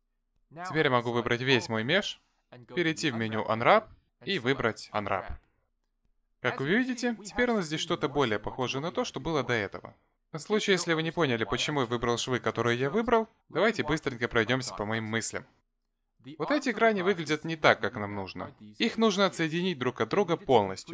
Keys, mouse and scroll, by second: 1.3 a, 2.7 middle click, 4.0 click, 11.4 middle click, 12.2-12.5 scroll down 2, 12.5 middle click, 15.9 click, 18.3 click, 19.0 click, 19.5 middle click, 20.5 shift+click.